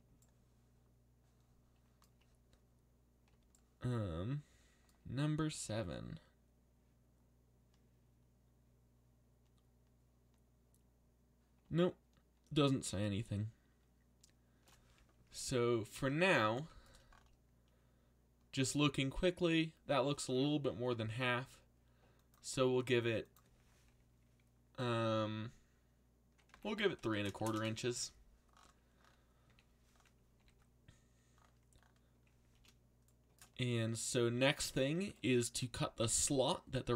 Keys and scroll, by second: 20.7-21.6 typing, 26.2-27.9 typing, 29.5 a, 30.3 z.